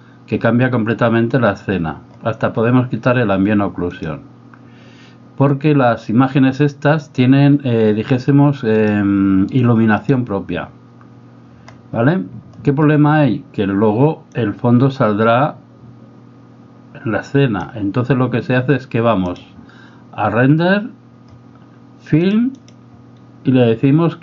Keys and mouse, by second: 3.9 click, 8.8-10.1 drag, 14.5-17.7 drag, 19.3 click, 22.2 click, 22.7 click.